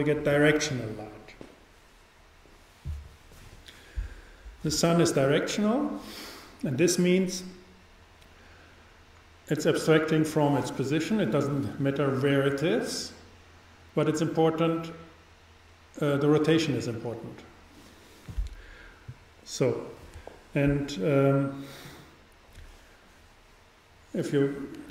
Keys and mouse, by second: 21.9-23.7 drag.